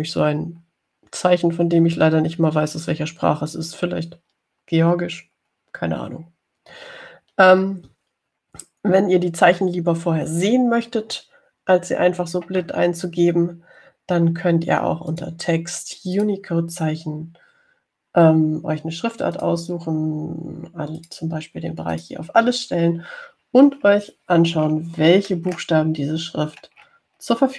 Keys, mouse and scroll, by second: 0.6-1.3 ctrl+scroll up 2, 2.5 ctrl+scroll up 2, 6.4-7.0 ctrl+scroll down 2, 7.3 ctrl+scroll down 2, 8.2-8.6 ctrl+scroll up 2, 16.4 click, 17.4 click, 20.6 click, 22.3 click, 23.2 click, 24.3-24.9 scroll down 2, 25.7 scroll down 1, 26.3-27.0 scroll up 4.